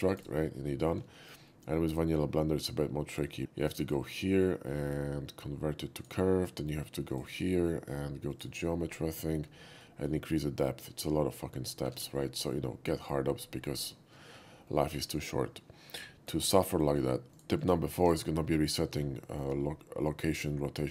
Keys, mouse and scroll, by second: 0.2 right click, 1.1 shift+middle click, 1.5 shift+middle click, 3.8 click, 5.9 click, 7.1 click, 8.3 click, 9.8 shift+click, 11.9 ctrl+z, 14.7 shift+middle drag, 16.0 shift+middle drag, 16.5 shift+middle click, 17.3 shift+click, 17.6 shift+click, 18.0 x, 18.0 click, 18.6-19.0 middle drag, 19.2 shift+middle drag.